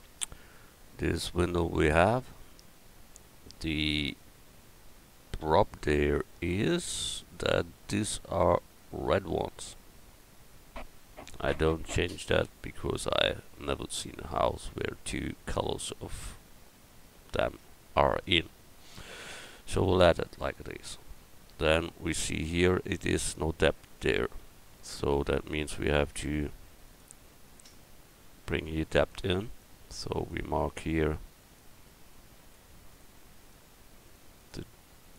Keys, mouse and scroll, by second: 1.9 middle click, 24.8 Tab, 26.9-29.0 drag, 26.9-35.1 right drag.